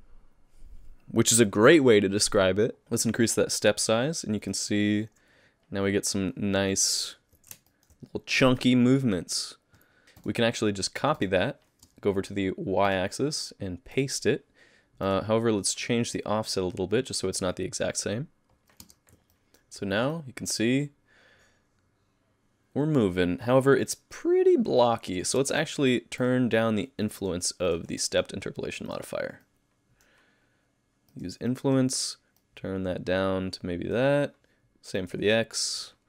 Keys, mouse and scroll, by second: 2.8 click, 6.7 middle click, 7.7 shift+middle click, 10.2 click, 11.2 click, 11.9 space, 12.9 click, 13.9 click, 15.1 click, 16.2 click, 18.8 space, 19.3 middle click, 20.1 middle click, 25.4 space, 26.2 click, 27.0 middle click, 27.7 click, 28.0 middle click, 28.9 click, 29.4 middle click, 31.5 click, 31.5 middle click, 32.4 click, 35.0 click, 35.8 click.